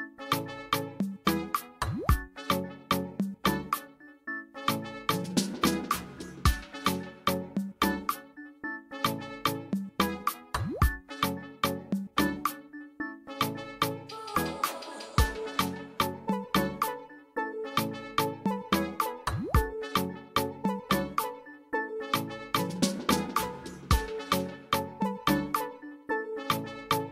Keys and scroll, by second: 3.0 ctrl+z, 17.9 \.